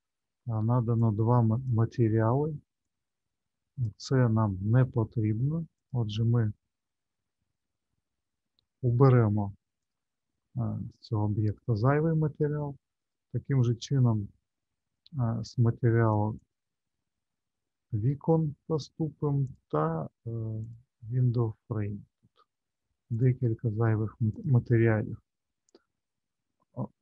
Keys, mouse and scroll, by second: 1.0 click, 2.8 click, 5.8 click, 9.8 click, 10.9 click, 12.9 click, 16.3 click, 20.6 click, 23.1 click, 24.3 click, 25.2-25.9 scroll up 2, 25.9-26.3 scroll down 4, 26.7 middle click.